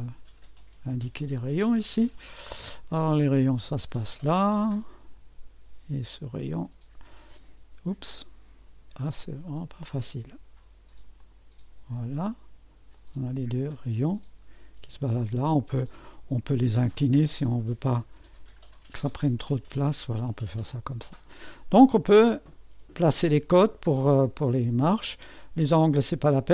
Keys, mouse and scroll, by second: 1.0 click, 3.5 click, 6.6 click, 9.5 click, 11.2 click, 12.9-19.0 drag, 19.2-21.4 drag, 21.0-21.9 scroll up 1, 22.1-23.3 scroll down 1, 23.3-24.6 scroll down 1, 24.6-26.1 scroll down 1, 26.1-26.5 scroll up 2.